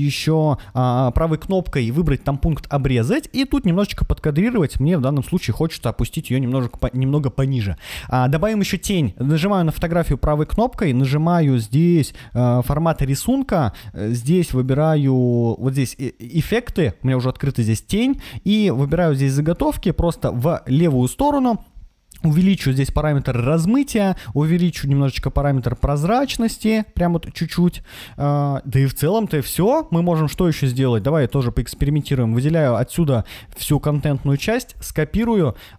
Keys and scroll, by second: 34.4 super+c.